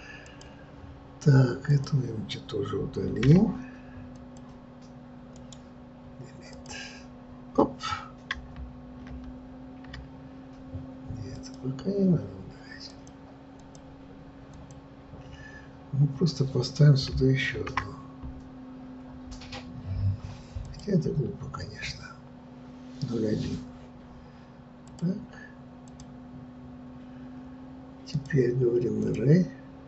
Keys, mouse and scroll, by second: 1.6 click, 3.0 Delete, 4.1 click, 6.5-9.4 right drag, 9.4 ctrl+z, 11.3 click, 12.9-20.6 drag, 24.9 click, 25.8 click, 29.0-29.8 drag.